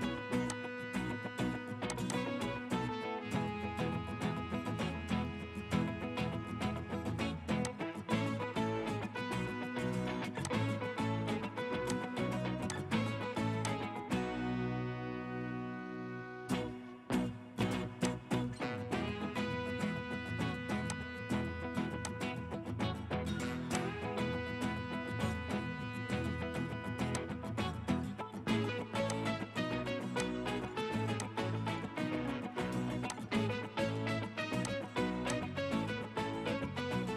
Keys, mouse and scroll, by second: 2.1 scroll up 1, 2.1 double click, 6.7 right click, 9.3 right click, 14.4-17.0 scroll up 1, 19.2 Escape, 28.3 Escape, 30.5-32.5 scroll up 1, 36.4-36.7 typing, 37.0 Return.